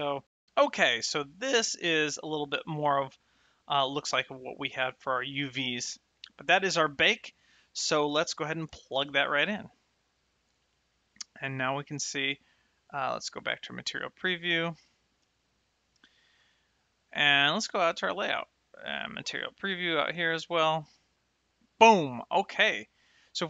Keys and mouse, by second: 9.0 ctrl+shift+click, 11.2 middle click, 13.0 click, 14.1 middle click, 16.5 shift+middle click, 17.4 click, 19.3 click, 21.3 shift+middle click, 22.3 middle click.